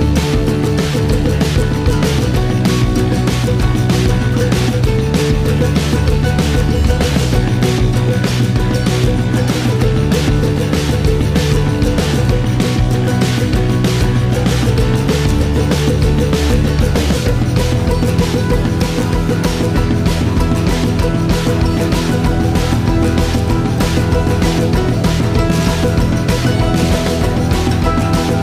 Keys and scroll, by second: 17.9 n, 19.5 ctrl+alt+0, 25.6-26.5 typing, 26.2 Return.